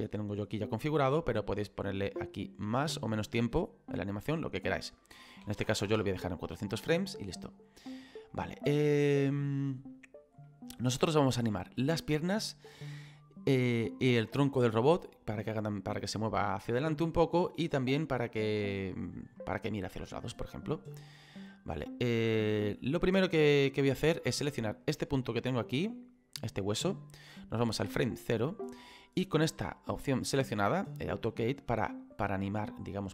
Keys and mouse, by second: 0.5 click, 2.6 click, 4.6 click, 5.4 KP_4, 5.9 Return, 5.9 KP_Enter, 8.3 middle click, 10.4 middle click, 15.0 middle click, 20.4 click, 24.9 right click, 25.9 middle click, 27.4 click.